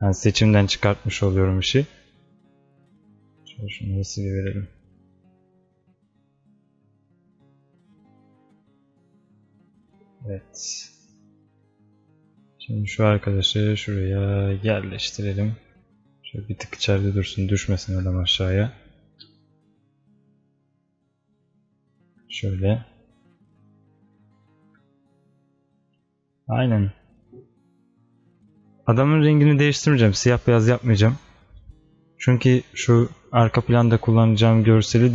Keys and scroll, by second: 18.4 alt+space.